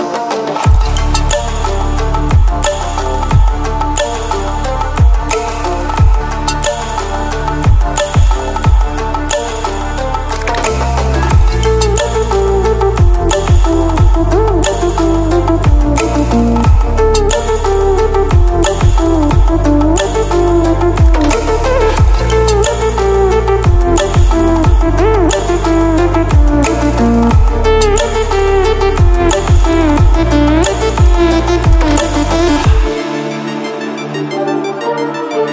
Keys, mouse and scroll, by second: 9.8 ctrl+w, 14.2 ctrl+w, 16.2 ctrl+w, 24.0 ctrl+w, 25.8-35.5 drag.